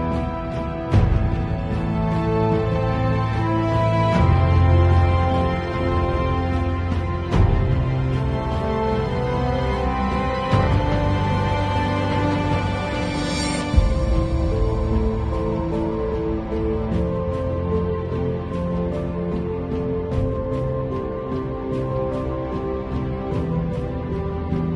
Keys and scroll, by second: 1.5 super+u, 4.5 Return, 15.0 super+], 16.8 super+t, 17.3 alt+super+t, 21.3 space, 23.0 b, 23.5 [.